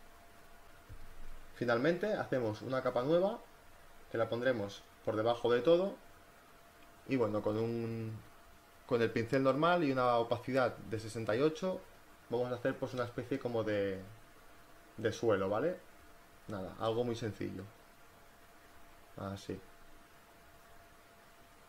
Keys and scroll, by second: 4.8 b, 5.6 ].